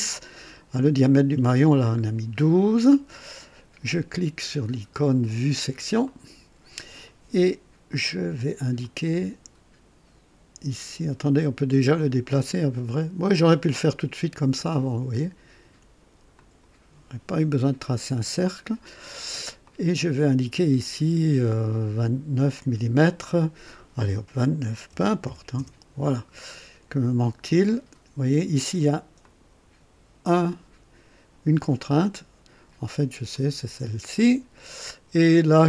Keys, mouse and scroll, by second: 0.0-0.4 scroll up 1, 2.0 scroll down 1, 2.6-3.2 right drag, 6.0 click, 8.8 click, 11.9-14.7 drag, 16.3 click, 19.6 click, 24.9 KP_2, 25.2 KP_9, 25.6 KP_Enter, 29.2 click, 33.3 click.